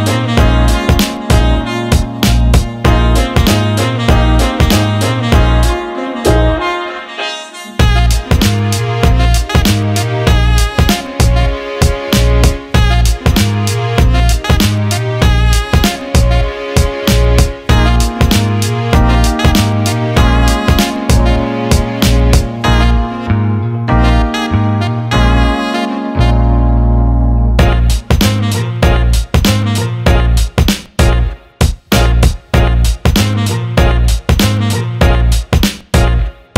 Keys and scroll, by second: 1.2 ctrl+x, 2.5 ctrl+v, 6.7-8.3 typing, 8.4 Return, 9.8 Delete, 17.5 Escape, 19.2 Escape.